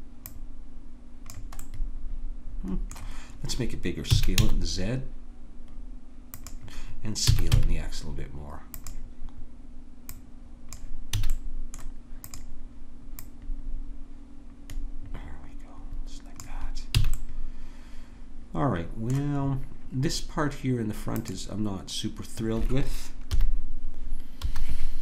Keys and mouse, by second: 4.1 s, 7.3 s, 10.0 click, 11.2 a, 14.8-16.4 drag, 17.0 a, 17.2-20.1 middle drag, 21.1-23.3 drag, 23.3 KP_3, 24.5 KP_1.